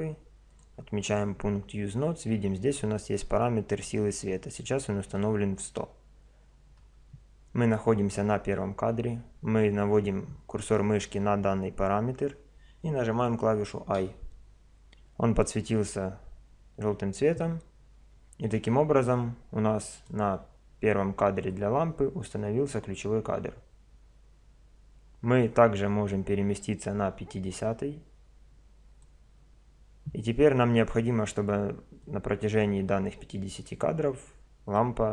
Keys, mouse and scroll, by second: 0.5 click, 14.0 i, 18.4 click, 21.5 click, 32.0 click.